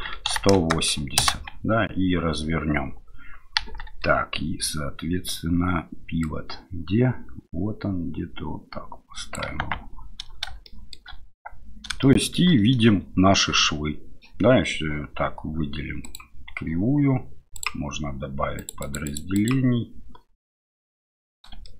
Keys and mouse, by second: 3.6 KP_1, 6.3-9.6 drag, 9.6 Tab, 10.6 shift+middle click, 12.0 shift+middle click, 16.1-20.4 drag, 20.4 middle click, 21.6 shift+middle drag.